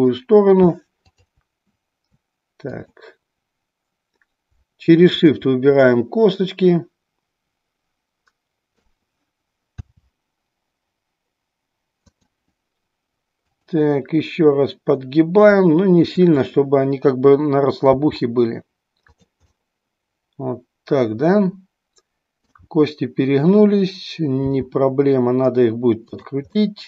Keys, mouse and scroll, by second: 1.2-2.5 drag, 2.8-4.4 drag, 5.1-6.7 drag, 6.8-8.4 middle drag, 8.5 middle click, 9.9 r, 12.2 click, 13.5-14.9 drag, 15.9-17.2 drag, 17.9 r, 19.3 click, 19.5 middle click, 20.8-22.7 middle drag, 22.7-24.3 scroll down 1, 24.3 r, 26.6-26.8 middle drag.